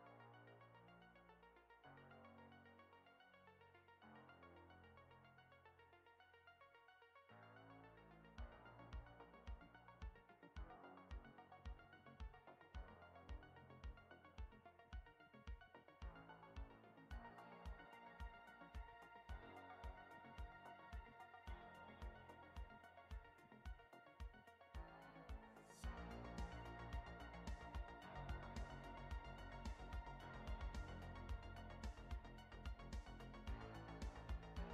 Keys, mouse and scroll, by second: 7.8 click, 10.7 click, 11.4 click, 12.1 click, 14.3 middle click, 16.9-17.4 scroll down 1, 17.6 middle click, 26.8 shift+middle click, 29.4 middle click, 30.6 shift+middle click.